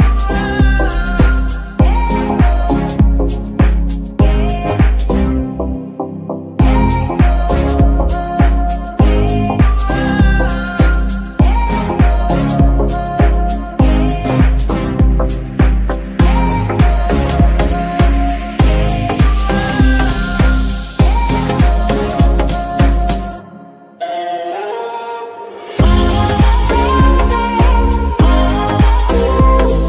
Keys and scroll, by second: 1.4 ctrl+Tab, 2.3 g, 4.6 Escape, 10.2 g, 16.4 Escape.